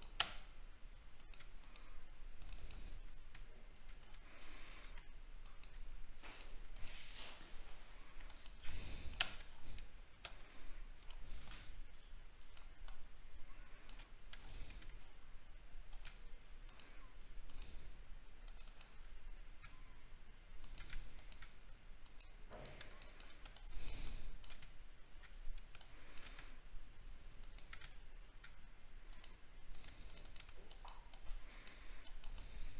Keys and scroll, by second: 4.1 alt+scroll up 1, 9.5 alt+scroll down 1, 14.4 alt+scroll up 1.